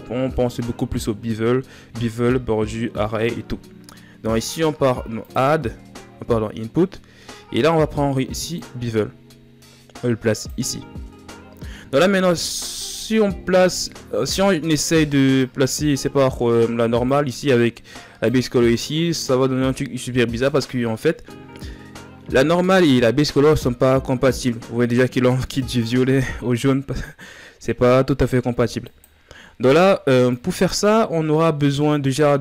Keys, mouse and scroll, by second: 8.2-18.0 drag, 28.7 drag, 29.2-30.6 scroll down 2, 31.4 scroll down 3, 31.6-32.4 middle drag.